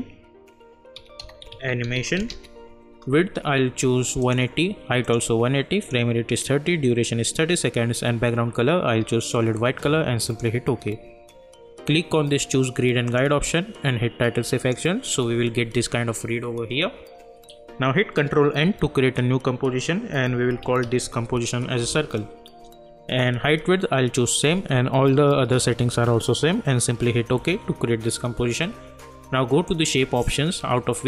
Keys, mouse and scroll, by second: 0.0-2.8 typing, 4.2 click, 10.2 click, 13.0 click, 17.6 click, 18.6 ctrl+n, 20.0-22.4 typing, 27.3 Return, 29.6-31.0 drag.